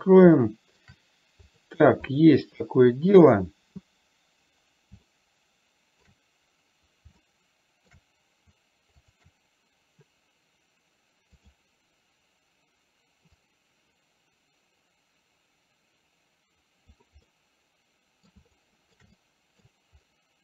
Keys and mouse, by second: 0.8 shift+middle drag, 1.8 click, 2.5 click, 5.4-6.4 shift+middle drag, 7.5-8.4 shift+middle drag, 11.8 click, 13.9-17.4 drag, 17.6-18.6 middle drag, 18.9-19.4 shift+middle drag, 19.5-19.9 middle drag.